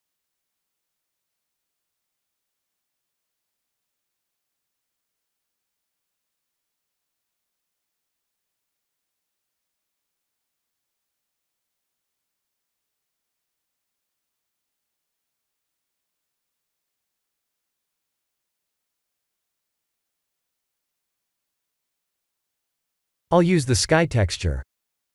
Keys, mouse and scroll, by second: 0.4 click, 1.2 click, 2.2 click, 6.4 click, 10.2 click, 13.0 click, 16.0 click, 17.0 click, 19.7 click, 22.4 click, 23.4 click.